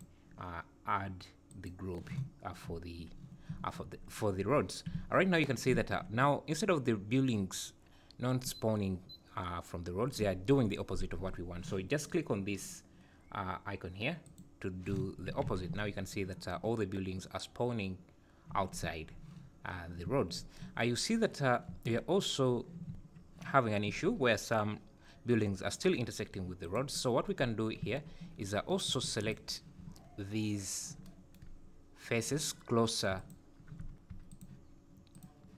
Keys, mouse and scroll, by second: 2.7 `, 3.5 `, 5.0 `, 5.8 `, 14.3 click, 15.5 alt+a, 15.7 `, 20.1 `, 21.1-21.4 scroll up 2, 22.4-22.9 scroll down 2, 22.4 `, 22.9 `, 23.9 `, 26.6 click, 27.2 Tab, 27.8 `, 28.9 3, 29.2 click, 33.2 alt+click, 34.3 alt+shift+click, 35.1 alt+shift+click.